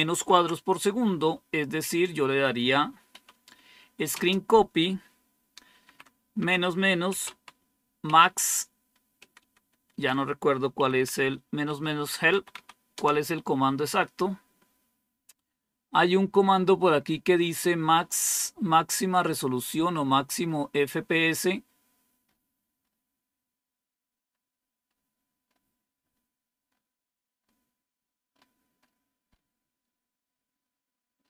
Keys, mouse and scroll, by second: 0.0 super+w, 1.8 click, 2.3 click, 3.0 Up, 4.0 space, 5.7-8.0 typing, 9.1-12.9 typing, 15.8 scroll up 1, 16.4-18.0 scroll up 3, 18.2-18.9 typing, 18.4 scroll up 2, 19.0 scroll up 2, 19.8 scroll up 2, 20.3 scroll up 2, 20.9-22.3 scroll up 4, 21.3-22.1 typing, 22.7 scroll up 2, 23.4-25.3 typing, 23.6-24.8 scroll up 1, 24.8 scroll up 1, 25.3 scroll up 2, 25.9 scroll up 2, 26.6 scroll up 2, 27.0-27.8 typing, 27.3-27.7 scroll up 3, 28.2-30.7 scroll up 8, 31.1 scroll up 2.